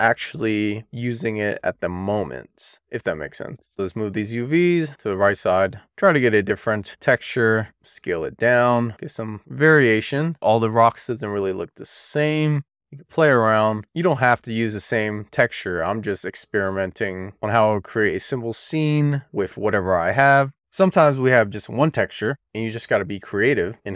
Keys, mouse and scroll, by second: 1.0 click, 3.9 w, 4.7 click, 7.2-9.2 middle drag, 10.0 click, 16.4-16.9 scroll up 2, 17.3-17.7 scroll down 1, 17.8 shift+middle click, 18.7-20.2 middle drag, 20.4-21.2 scroll up 3, 21.2 click.